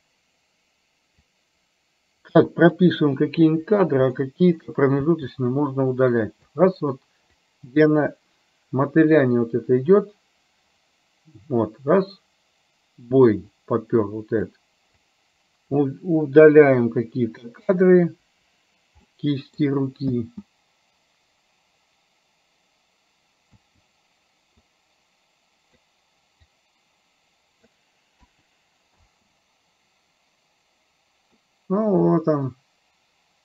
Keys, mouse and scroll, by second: 0.0 i, 1.5-3.1 drag, 3.6 Delete, 4.3 middle click, 5.1 space, 6.6 space, 7.4-14.7 drag, 15.0 click, 16.8 Delete, 18.4 Delete, 19.1 middle click, 20.2 space, 23.6 space, 24.7-25.9 drag, 26.6-27.8 drag, 28.3 Delete, 29.1 space, 31.4-33.4 middle drag.